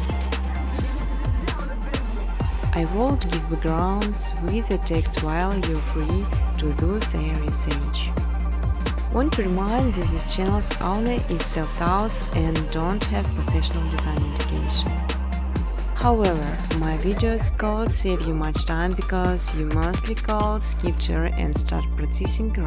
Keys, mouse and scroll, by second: 0.0-1.9 typing, 2.7 click, 2.9 click, 5.8 click, 6.7 click, 8.4 click, 8.8 click, 9.2-10.9 typing, 16.3 click, 17.2-19.8 typing, 17.4 click, 21.2 click.